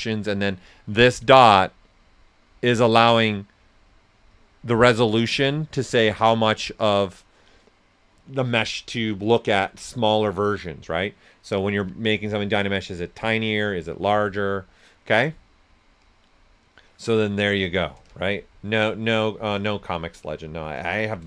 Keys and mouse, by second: 17.6 right click, 18.0-21.2 shift+drag.